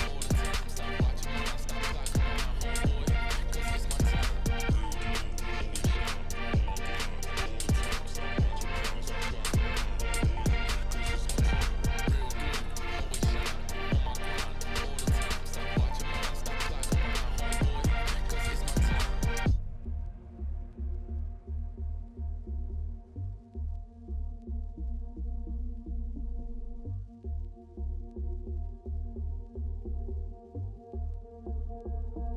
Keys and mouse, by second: 0.0 e, 1.4 click, 1.7 click, 2.2 ctrl+b, 3.6 Tab, 4.0-4.3 drag, 4.4 click, 4.9-5.3 drag, 5.7-6.1 drag, 6.5 click, 6.8 shift+drag, 7.8 shift+a, 10.3 ctrl+alt+KP_0, 11.0 ctrl+b, 18.8-20.7 drag, 20.7 g, 23.5-23.9 drag, 24.2-26.1 drag, 24.9 0, 26.1 g, 28.8 g, 30.0 g, 32.0 ctrl+s.